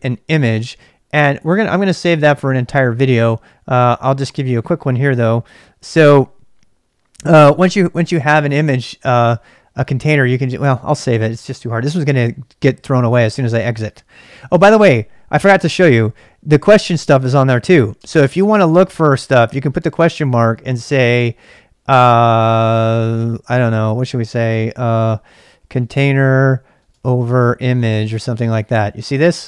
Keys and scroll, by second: 18.0 shift+space, 25.3-28.5 typing.